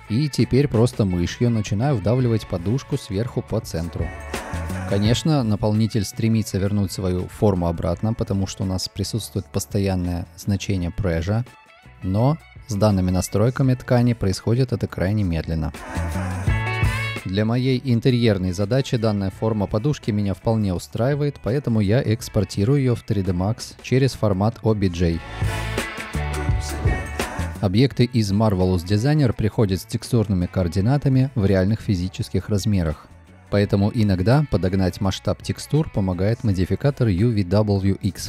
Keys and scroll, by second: 4.8 space, 7.8 space, 11.5 space, 12.9 space, 14.7 space, 16.8 space, 23.0 F6, 27.1 F6, 29.6 m.